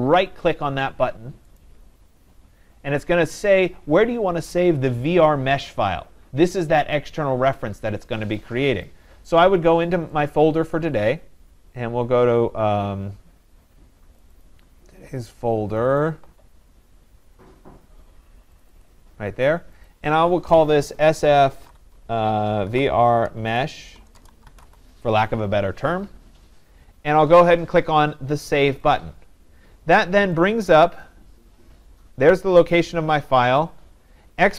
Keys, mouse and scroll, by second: 1.6 right click, 9.3 click, 10.3 click, 14.2 click, 14.5 click, 15.8 click, 16.7 click, 16.7 scroll, 18.7 click, 18.9 click, 19.9 click, 21.3-25.1 typing, 30.7-34.5 drag.